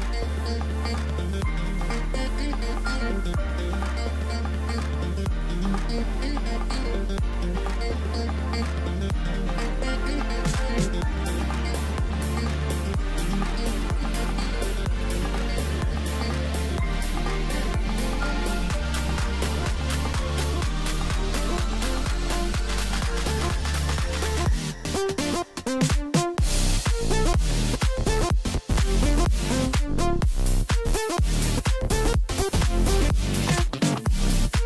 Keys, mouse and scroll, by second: 0.1 middle click, 0.9 click, 1.1 click, 1.6-2.5 middle drag, 2.5-5.3 drag, 5.3-7.2 middle drag, 7.2 Tab, 7.7-9.1 middle drag, 9.1 click, 10.4 click, 10.6 scroll down 2, 10.8-12.2 middle drag, 12.2 scroll down 3, 13.1-13.7 scroll up 7, 13.7-15.1 middle drag, 15.1 scroll up 2, 15.5 Tab, 15.9-17.1 middle drag, 17.1 click, 18.3 shift+click, 19.2 x, 20.5-21.1 scroll down 8, 21.2-22.8 middle drag, 22.8 shift+b, 24.7-27.1 middle drag, 27.1 click, 29.2-30.2 middle drag, 30.2 g, 31.5 click, 32.2 scroll up 1, 32.5-32.8 scroll down 1, 32.8-34.0 middle drag, 34.0 scroll down 3, 34.3-34.6 middle drag.